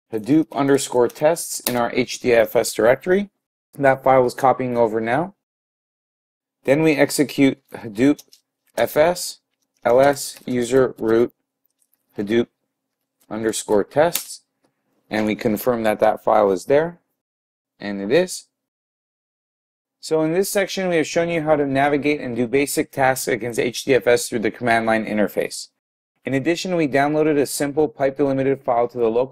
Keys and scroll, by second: 0.5 typing, 8.2-10.5 typing.